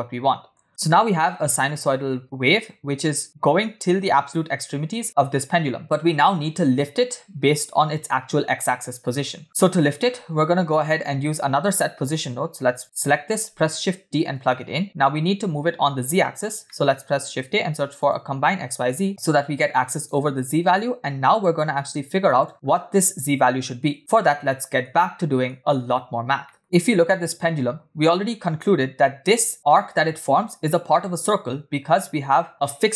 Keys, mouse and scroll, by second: 0.7 space, 5.2 space, 5.8-7.4 middle drag, 7.5-8.3 scroll up 1, 8.3 scroll up 1, 9.1-10.0 scroll down 5, 9.4 middle click, 9.7 scroll up 1, 10.5 scroll up 2, 10.6-12.1 drag, 12.7 drag, 13.4 shift+d, 16.7-17.1 middle drag, 17.2 shift+a, 19.5 click, 21.1-22.5 drag, 22.5 middle drag, 22.6-23.7 scroll up 1, 24.1-24.5 scroll down 1, 24.5 middle click, 25.2 shift+middle drag, 25.7-26.4 scroll down 1, 26.5 middle click, 29.5 click, 32.5 click.